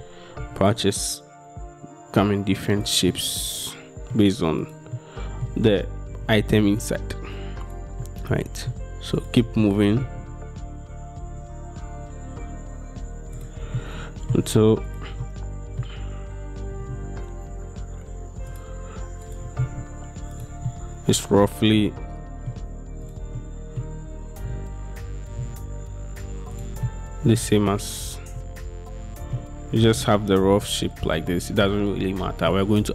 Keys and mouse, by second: 0.0 g, 0.5 x, 3.2 click, 3.5 middle click, 4.7 click, 5.0 click, 5.1 middle click, 6.2 g, 6.5 x, 7.7 click, 8.1 click, 8.5 middle click, 9.7 middle click, 10.3 g, 13.4 middle click, 13.8 middle click, 15.3 middle click, 16.7 g, 17.0 x, 18.6 click, 19.3 click, 19.5 g, 19.7 x, 20.8 click, 21.9 click, 23.5 click, 24.5 g, 25.5 x, 26.6 click, 26.9 click, 28.1 click, 28.5 click, 29.9 g, 30.1 x, 31.0-32.6 drag.